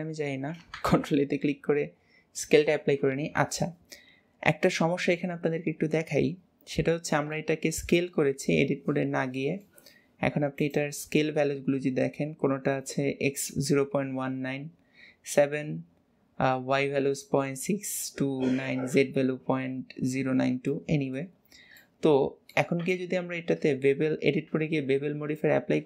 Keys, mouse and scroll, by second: 0.9 ctrl+a, 7.5-10.7 middle drag, 10.7 click, 20.8 middle click, 21.6 scroll up 1, 21.9-22.9 middle drag, 22.9 Tab.